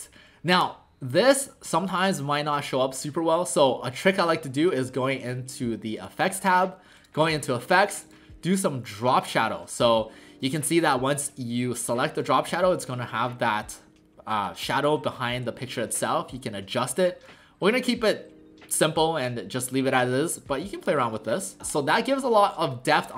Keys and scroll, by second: 21.6 typing.